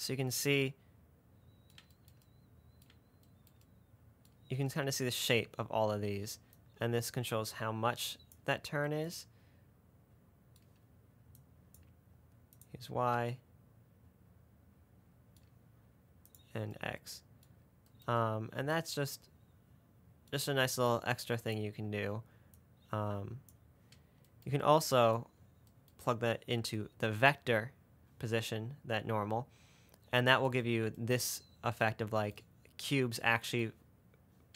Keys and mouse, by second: 2.5 middle click, 2.7 middle click, 3.3 middle click, 6.8-8.6 drag, 9.2 middle click, 11.6 click, 12.8 click, 16.5 click, 17.4-17.8 middle drag, 21.2 click, 22.9-23.8 drag.